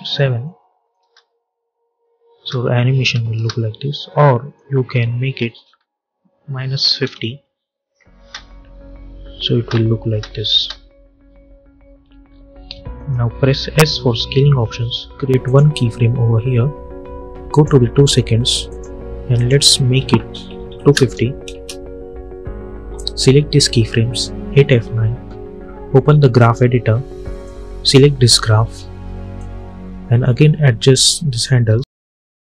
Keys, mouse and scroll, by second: 0.9 space, 4.0-5.3 drag, 6.1 -, 6.9 Return, 8.0 space, 12.1 scroll up 1, 12.8 click, 13.6 s, 15.3 click, 21.4 Return, 22.8-24.3 drag, 24.3 F9, 26.3-32.4 drag.